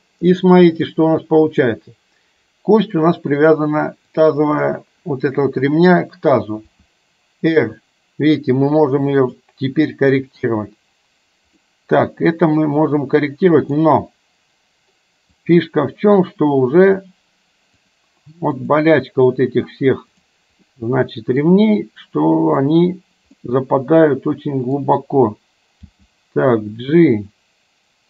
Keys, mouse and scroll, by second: 0.5 middle click, 4.2 click, 6.7 r, 11.7-13.7 middle drag, 15.6 click, 17.9 click, 18.9 click, 20.2 click, 20.9-21.6 middle drag, 22.7 click, 23.4-24.9 middle drag, 26.0 g.